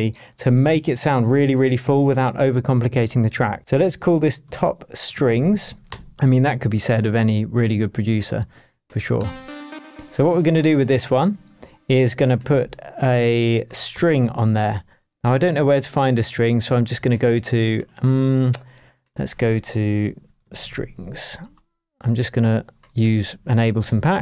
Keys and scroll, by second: 4.4-6.1 typing, 9.2 space, 13.9 BackSpace, 19.9-21.3 typing, 23.0 Right, 23.7 Down, 24.0 Right.